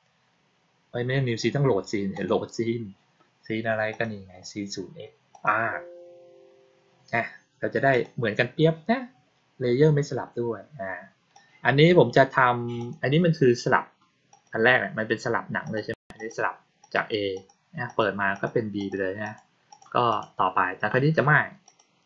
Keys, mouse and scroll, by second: 2.0 click, 3.8 click, 5.2 click, 7.8 click, 11.2 click, 12.6 click, 14.2 click, 15.5 click, 16.0 click, 16.6 click, 17.2 click, 17.7 click, 18.2 click, 18.6 click, 19.1 click, 19.6 click, 20.0 click, 21.5 click.